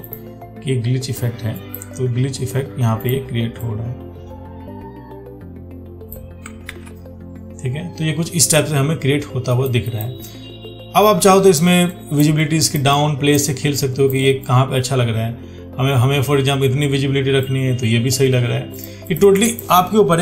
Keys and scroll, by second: 7.0 ctrl+d.